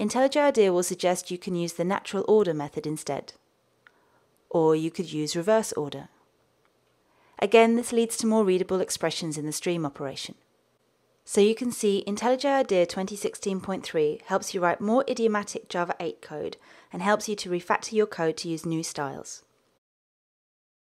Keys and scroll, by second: 1.0 alt+Return, 3.8 ctrl+space, 10.5 Tab, 13.7 alt+Return.